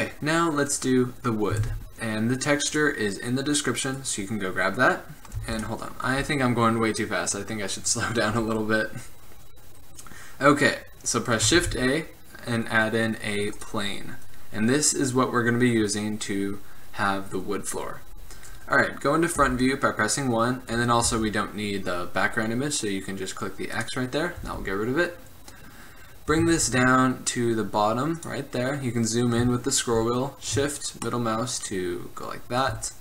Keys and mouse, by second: 1.6 shift+a, 5.5 x, 11.6 shift+a, 15.3-17.1 middle drag, 19.4 KP_1, 21.2 n, 23.9-26.4 drag, 24.5 n, 26.4 g, 31.2-31.7 middle drag.